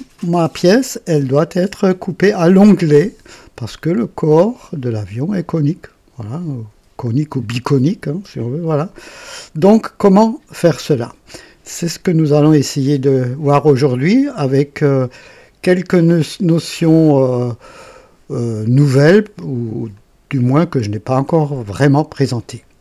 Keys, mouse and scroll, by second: 13.7 click, 15.9 click, 16.9 click, 19.9-22.4 drag.